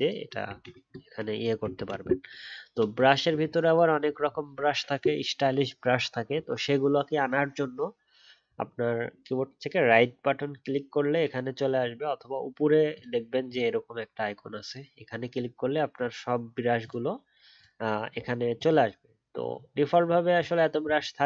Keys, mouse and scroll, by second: 0.5 ctrl+z, 1.7 ctrl+z.